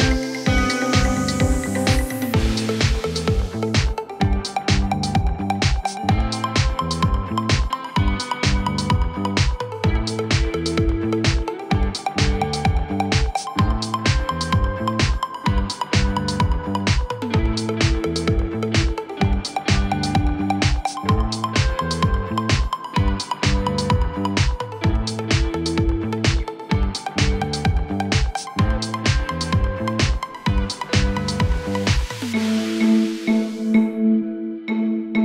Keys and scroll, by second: 1.0 Return, 1.9 9, 9.4-10.2 typing, 17.8 Caps_Lock, 18.3-20.8 typing, 23.1-23.8 typing, 25.1-28.0 typing, 32.1 Return, 33.0-33.8 typing.